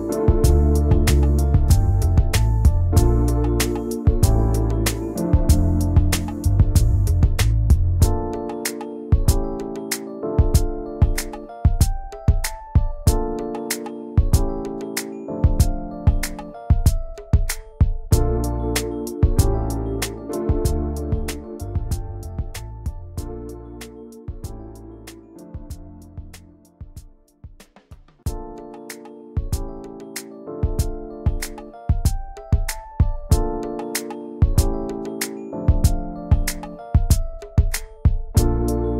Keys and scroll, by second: 0.2 /, 1.7 Return, 2.3 i, 2.7 v, 15.8 Return, 16.2 a, 18.2 Return, 20.5 Return, 22.7 Return, 23.4 a, 24.7-29.8 typing, 31.7 v.